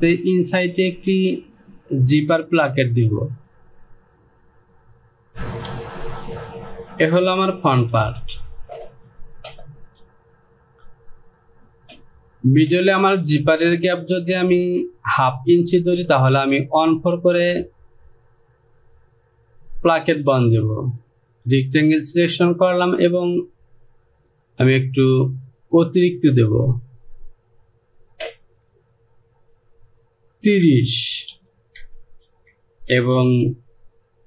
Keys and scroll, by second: 5.8 s, 7.9 Home, 30.4 Down, 31.3 KP_3, 31.7 KP_0, 32.2 Down.